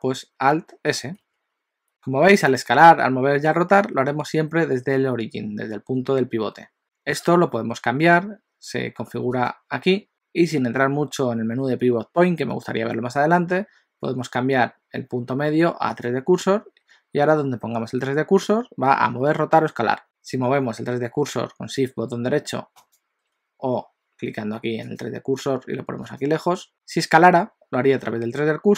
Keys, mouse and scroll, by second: 1.2 alt+s, 4.1 s, 9.4 click, 22.8 shift+right click, 25.1 click, 26.2 click, 27.2 s.